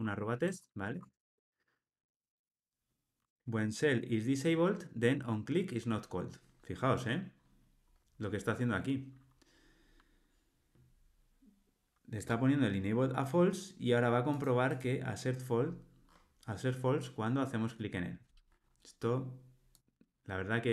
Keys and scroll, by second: 0.9 Tab, 12.2 Tab.